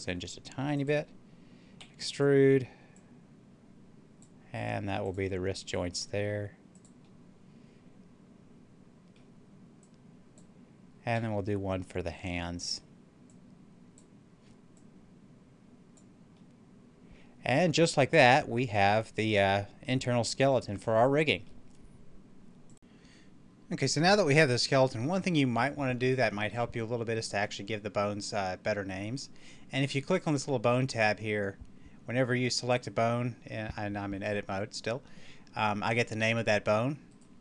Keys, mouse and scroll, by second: 0.7 click, 1.7 e, 1.9 right click, 2.8-4.9 drag, 5.7 s, 6.6 click, 6.9-9.6 middle drag, 9.6-11.0 drag, 11.0 e, 12.5 right click, 13.2-16.3 drag, 16.3-22.6 middle drag, 22.6 click, 30.0 click, 32.6 right click, 36.9 right click.